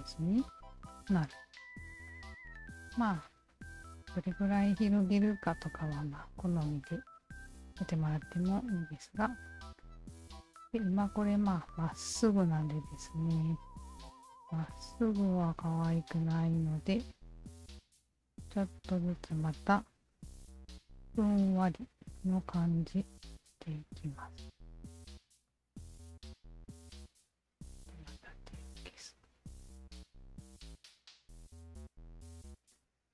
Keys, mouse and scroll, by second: 0.5 alt+click, 1.1 alt+click, 1.6 alt+click, 2.7 alt+right click, 3.2 alt+middle click, 3.5-8.4 alt+drag, 9.7-10.4 alt+right drag, 12.4 alt+click, 13.3 alt+click, 14.3 alt+click, 15.1 Tab, 16.3 alt+click, 17.3 2, 17.7 Tab, 17.7 click, 18.5 alt+middle click, 19.0 alt+right click, 20.0 s, 21.5 1, 22.2 click, 23.4-25.2 shift+drag, 25.5 alt+click, 26.4 alt+click, 28.8 alt+click, 29.4-30.6 alt+right drag, 30.6 alt+click, 31.7 r.